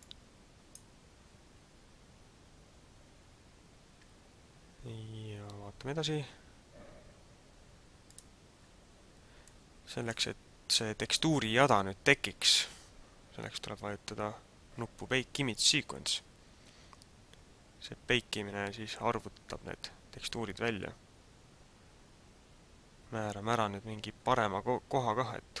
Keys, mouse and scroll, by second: 0.2 click, 8.1 click, 9.6 click.